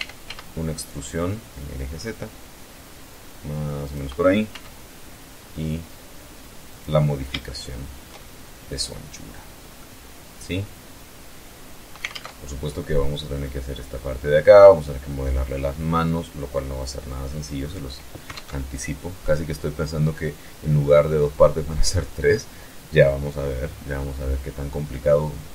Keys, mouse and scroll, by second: 3.3 click, 4.0 s, 6.2 click, 6.9-7.5 shift+middle drag, 7.5 shift+scroll up 2, 7.7 shift+scroll down 2, 7.9 shift+scroll up 3, 8.3-9.0 scroll down 4, 9.3-11.6 middle drag, 11.6 alt+Tab, 16.7-17.4 scroll up 4, 17.9 alt+Tab, 18.6-19.3 scroll up 2, 19.4 scroll down 2, 20.3-22.0 middle drag, 23.4-23.9 scroll up 2, 24.0 scroll down 2, 24.4 middle click, 25.3 alt+Tab.